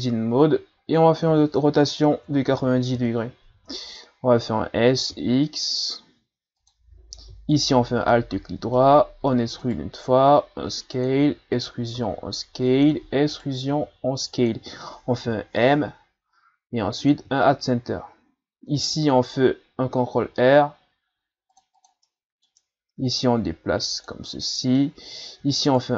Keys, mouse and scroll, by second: 1.3 r, 4.8 s, 7.5 alt+right click, 8.1-9.2 middle drag, 9.2 e, 10.1 s, 11.1 e, 12.0 s, 12.9 e, 13.7 s, 15.2 m, 18.8 ctrl+r, 22.1 middle click, 23.0-24.3 drag, 24.3-25.7 middle drag, 25.7 alt+right click.